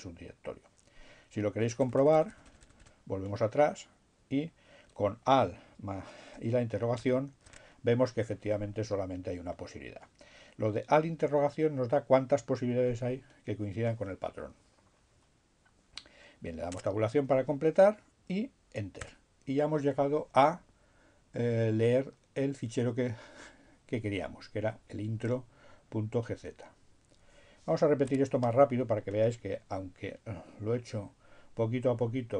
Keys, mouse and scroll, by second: 7.1 alt+shift+', 15.9 Tab, 19.2 Return, 28.2 q.